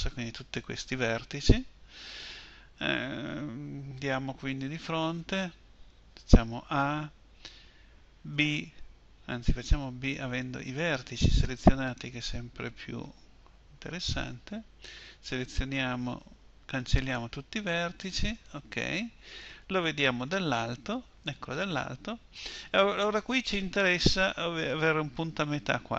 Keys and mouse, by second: 4.5 KP_1, 6.4 a, 8.2 b, 12.9 b, 16.0 Delete, 20.1 KP_7.